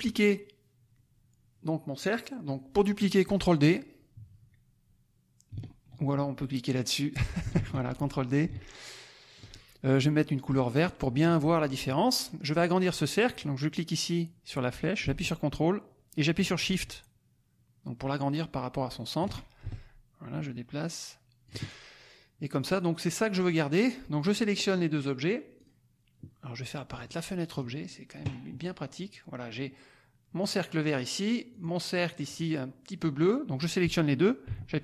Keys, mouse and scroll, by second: 7.5 ctrl+d, 8.4-9.5 ctrl+drag, 10.7 click, 13.3-19.5 drag, 19.6-21.6 ctrl+shift+drag, 25.5 click, 26.9 click, 27.5 click, 30.4 click, 30.9 click, 32.1 click.